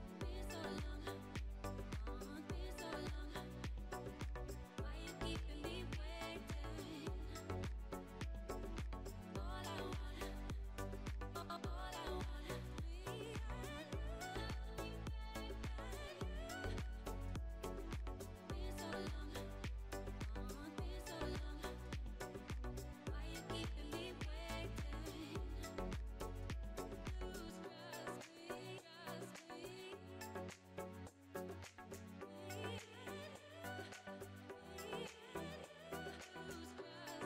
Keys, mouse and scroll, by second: 0.0 click, 0.5 middle click, 1.0 click, 1.6 Tab, 2.6 click, 3.7-5.6 drag, 5.6 Tab, 5.8 click, 6.2-6.9 scroll down 5, 6.9-10.1 shift+middle drag, 10.0-10.4 scroll up 2, 10.9 scroll up 1, 10.9 click, 11.4-15.2 shift+middle drag, 15.2 s, 17.8 shift+middle click, 18.8-21.8 drag, 22.3 click, 22.6 scroll down 1, 22.9-24.5 shift+middle drag, 24.5 click, 26.3-27.8 middle drag, 27.8 scroll, 27.8-28.4 scroll up 1, 28.5 scroll up 3, 31.0-35.6 shift+middle drag, 35.7 click, 36.4-37.0 shift+middle drag, 37.0 click.